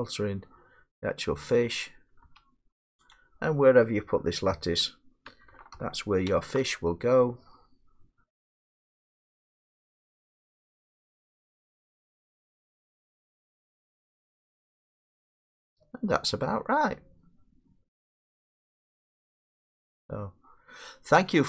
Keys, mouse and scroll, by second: 0.1 scroll, 0.2 middle click, 1.9 click, 2.3 g, 3.1 click, 5.7 BackSpace, 8.1 middle click, 8.1 Left, 8.1-8.7 scroll up 4, 8.7 scroll down 2, 11.3 scroll.